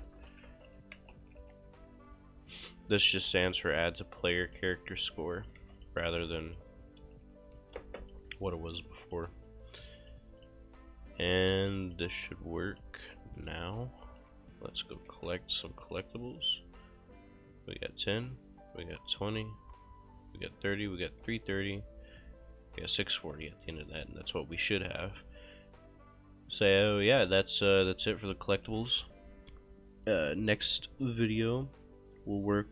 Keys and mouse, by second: 0.0 click, 0.3-1.9 typing, 3.5 click, 5.4 shift+click, 5.6 q, 5.8 click, 7.6 ctrl+click, 7.8 click, 8.0 Escape, 8.3 click, 8.7 shift+click, 8.9 q, 9.1 click, 13.4 right click, 13.6-16.0 typing, 17.3-19.5 typing, 20.8-23.4 typing, 27.1-28.2 typing.